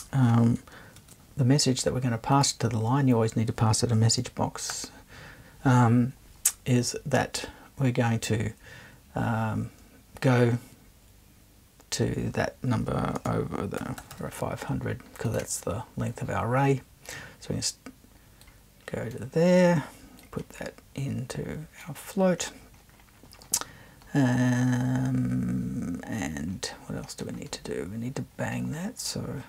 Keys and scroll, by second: 1.0 super+2, 4.7 0, 13.2-14.5 typing.